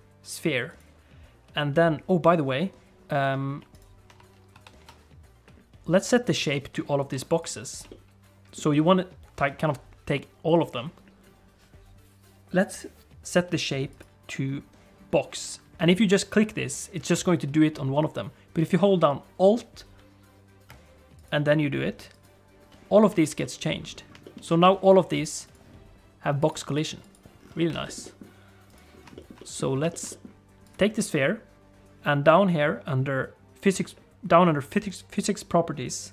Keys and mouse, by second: 3.7 shift+click, 4.5 ctrl+i, 7.4 click, 7.8 middle click, 13.9-17.0 drag, 21.2-22.3 alt+drag, 23.2 shift+middle click, 23.4 middle click, 24.2 shift+middle click, 24.5 alt+a, 24.8 click, 25.1 click, 26.4 click, 26.7 click, 27.7 alt+a, 27.8 middle click, 28.0 middle click, 28.7 click, 29.1 shift+middle click, 29.3 middle click, 29.9 shift+middle click, 30.0 middle click, 30.6 click.